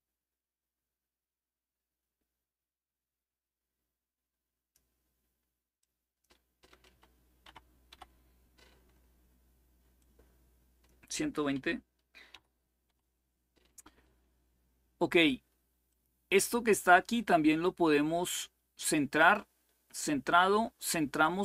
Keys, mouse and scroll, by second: 5.5 click, 6.4-8.1 typing, 9.7-11.2 drag, 11.2-12.5 typing, 15.6-18.2 drag, 18.9 click.